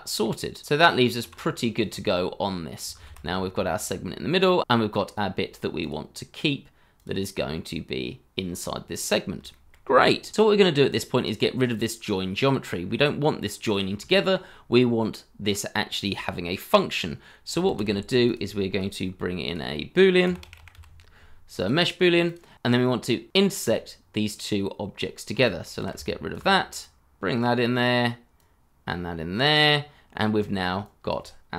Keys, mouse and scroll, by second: 0.6 t, 1.8 middle click, 2.9 shift+z, 3.3 scroll up 1, 3.6 middle click, 4.1-4.6 scroll up 1, 4.6 scroll down 1, 4.7 middle click, 7.5-8.5 scroll up 1, 8.5 scroll down 1, 9.5 shift+middle click, 12.8-13.5 scroll up 1, 14.1 shift+middle click, 17.6 shift+a, 20.2-21.2 typing, 25.4 shift+click, 26.0 shift+click.